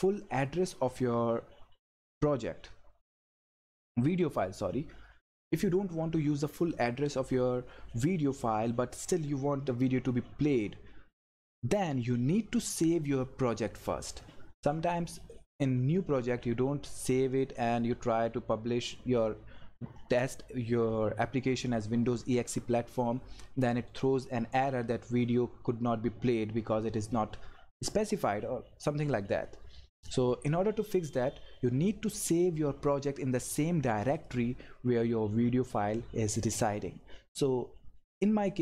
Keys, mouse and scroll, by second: 34.1 click.